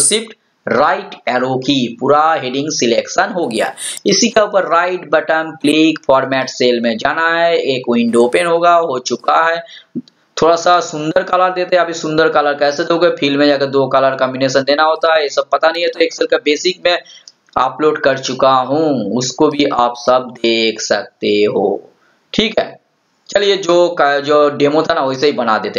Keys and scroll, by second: 1.3 ctrl+shift+Right.